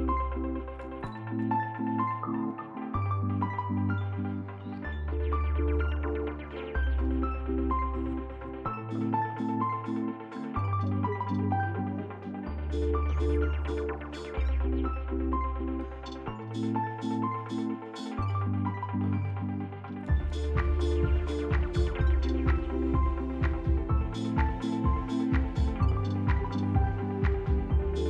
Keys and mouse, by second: 0.6-2.2 drag, 5.0-6.0 drag, 7.5-8.9 drag, 9.3 alt+z, 9.7 Tab, 10.1 z, 11.9 alt+z, 12.2 middle click, 12.9 shift+middle click, 13.4 middle click, 14.5 click, 15.3 Tab, 16.7 middle click, 17.3 shift+middle click, 18.4 shift+middle click, 19.5-20.6 drag, 21.4 click, 22.2 click, 23.3 typing, 23.6 shift+middle click, 26.6 middle click, 27.0 ctrl+F4.